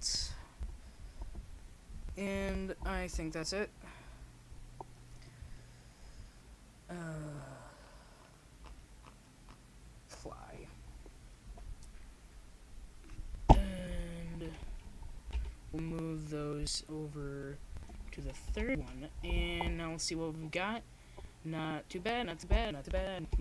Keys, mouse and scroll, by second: 1.6-3.8 drag, 9.7-17.0 drag, 17.0 middle click, 19.2-20.8 drag, 20.8 m.